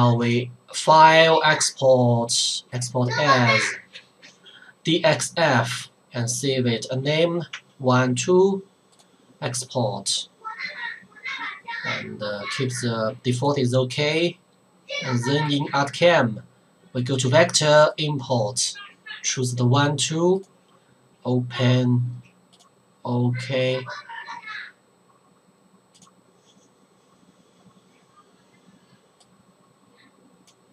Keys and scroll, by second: 7.7 1, 8.0 2.